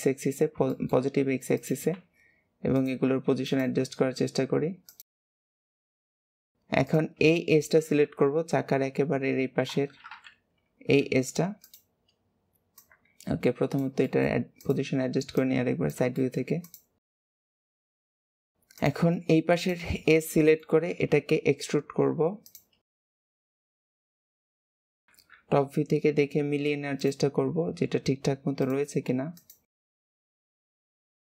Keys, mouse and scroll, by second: 0.6 shift+middle click, 0.9 scroll up 2, 1.5 click, 1.9 g, 3.4 click, 3.8 g, 5.1 shift+middle click, 5.4 click, 5.5 g, 5.8 shift+middle click, 6.0 click, 6.1 g, 6.8 shift+click, 8.0 KP_1, 11.6 click, 12.7 click, 14.0 shift+middle click, 14.5 click, 15.3 click, 16.2 shift+middle click, 16.6 click, 17.1 click, 17.6 click, 17.9 click, 18.2 shift+middle click, 18.7 click, 19.5 shift+click, 20.2 scroll down 1, 20.2 shift+middle click, 20.8 e, 23.5 click, 24.8 shift+click, 26.1 scroll up 1, 26.9 click, 27.3 g, 29.3 click, 29.6 g, 30.1 shift+click, 30.2 shift+middle click, 30.4 e, 31.1 click, 31.2 g.